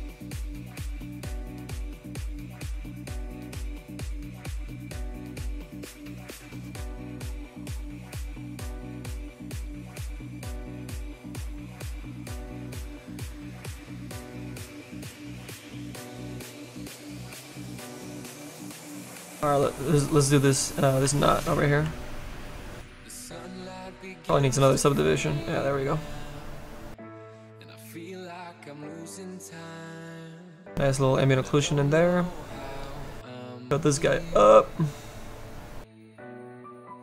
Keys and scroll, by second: 2.8 s, 21.0 s, 21.8 s, 24.2 ctrl+d.